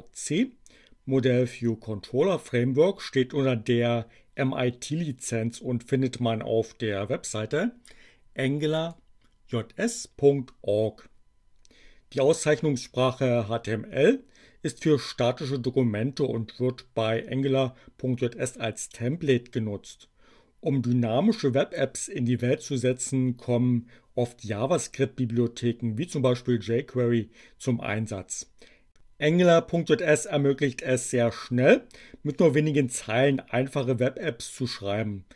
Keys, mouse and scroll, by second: 8.6 click.